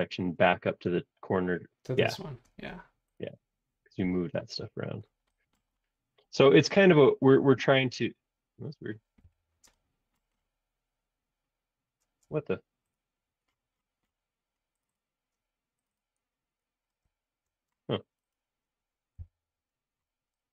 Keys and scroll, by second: 4.0 l, 7.3 Escape, 7.5 space, 9.2 l, 12.0 space, 12.2 Escape, 19.2 l.